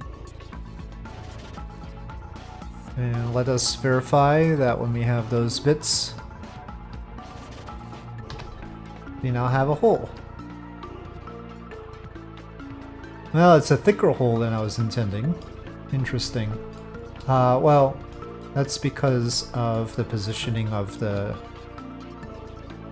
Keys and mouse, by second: 4.6 click, 9.5-11.7 middle drag, 11.9 shift+middle drag, 12.7-15.4 middle drag, 16.8-17.2 middle drag, 17.3-18.1 shift+middle drag, 18.5-18.9 shift+middle drag, 19.7-20.3 middle drag, 20.6 shift+middle click.